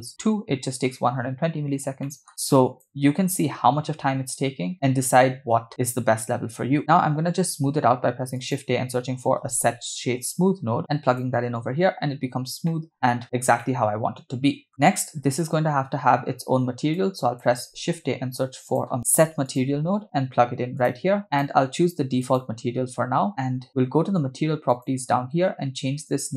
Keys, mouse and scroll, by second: 1.8 scroll down 2, 2.1 middle click, 2.4-2.9 drag, 6.8 shift+a, 10.8 BackSpace, 12.7-13.4 middle drag, 13.6-14.7 shift+middle drag, 14.8 scroll down 2, 17.0-17.5 drag, 17.7 shift+a, 21.3-22.6 drag, 24.7 click, 26.1-26.3 drag.